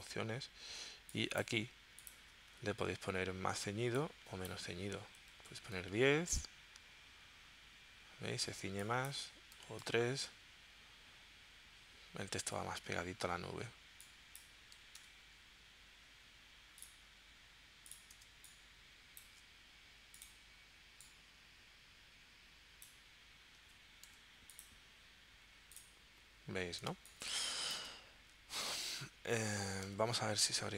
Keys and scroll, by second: 5.1-6.0 typing, 9.6 3, 9.8 Tab, 14.8 4, 15.0 Tab, 18.3 space, 24.1 4, 26.9 space, 30.0 super+Tab.